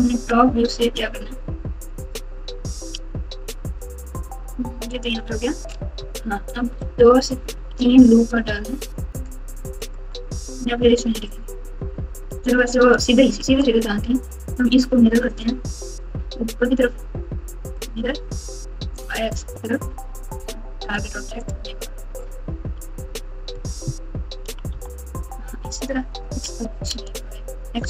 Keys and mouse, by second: 0.6 g, 2.9 r, 5.2 Tab, 7.5 ctrl+r, 12.4 1, 13.1 Tab, 15.4-17.9 drag, 18.9-21.0 drag, 22.7 KP_1, 24.4 KP_3, 24.7 KP_9, 26.6 g.